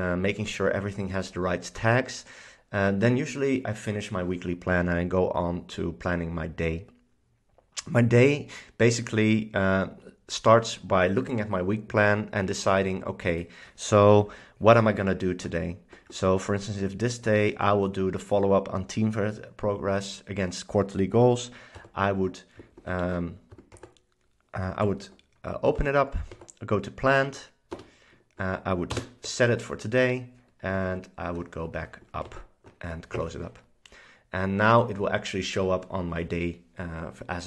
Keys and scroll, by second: 16.4 Down, 17.4 Right, 21.9 shift+super+Down, 23.0 shift+super+Up, 23.9 super+Right, 24.9 super+Down, 25.8 Down, 26.4 Right, 27.8 Return, 29.1 space, 31.0 super+Up, 32.4 super+Up.